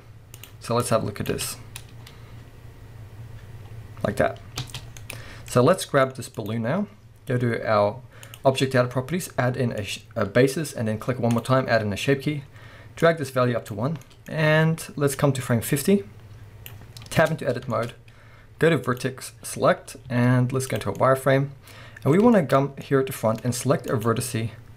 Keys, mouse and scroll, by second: 0.8-5.1 drag, 1.3 space, 2.0-4.1 scroll up 1, 4.6 space, 4.9 scroll down 1, 5.1-6.4 middle drag, 5.5 scroll down 2, 6.1-6.4 scroll up 2, 6.4 click, 8.3 click, 9.8-14.0 drag, 14.0-15.2 middle drag, 15.2-17.2 drag, 17.0 scroll up 1, 17.2 b, 17.6-18.0 shift+scroll up 2, 17.7 shift+middle click, 18.9 click, 21.0 middle click, 22.4 shift+middle click, 22.6 scroll up 1, 22.8 middle click, 23.7 middle click, 23.9 click, 24.3-24.7 middle drag.